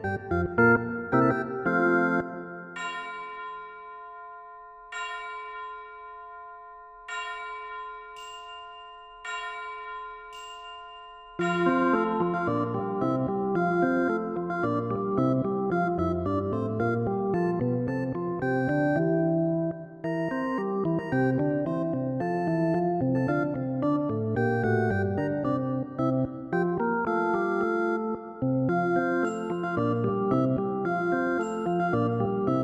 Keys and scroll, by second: 29.6 ctrl+z.